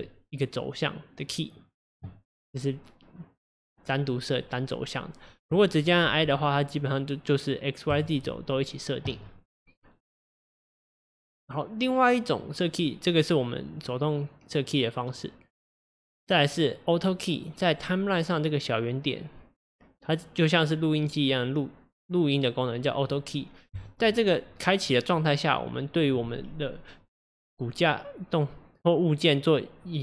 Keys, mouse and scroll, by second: 8.0 i, 12.4-16.2 drag.